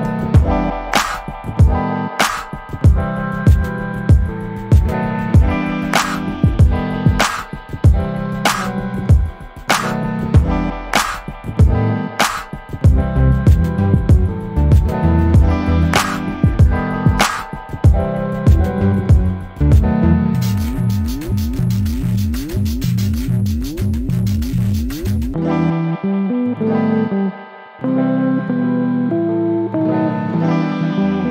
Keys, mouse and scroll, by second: 2.2 click, 3.0 click, 6.0 click, 8.1 ctrl+d, 9.0 click, 9.9-12.1 ctrl+drag, 12.9 click, 13.7 click, 16.6-17.6 ctrl+shift+drag, 17.9 ctrl+shift+click, 19.4 click, 20.6-23.8 ctrl+shift+drag, 24.1-24.9 ctrl+shift+scroll up 5, 25.8 ctrl+shift+click, 27.0 ctrl+shift+click, 28.6 ctrl+d, 28.9 ctrl+click.